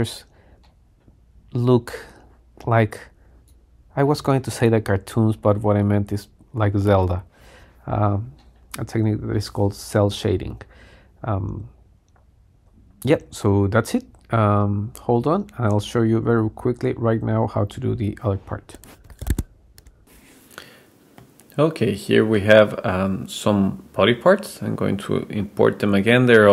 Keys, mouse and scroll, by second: 0.1-0.9 scroll down 2, 0.9-3.2 middle drag, 3.2 click, 3.6-4.4 drag, 4.8-5.5 scroll down 1, 5.8 scroll down 1, 8.7 middle click, 21.2-22.5 middle drag, 22.7 click, 24.1-26.5 drag.